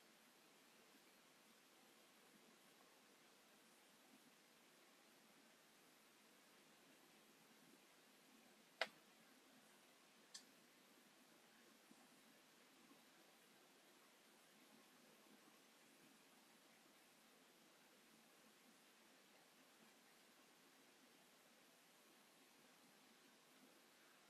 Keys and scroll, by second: 5.4 p, 6.0 space, 10.1 v, 12.2 typing, 12.3 Return, 15.0-16.6 typing, 17.6 m, 18.7 space.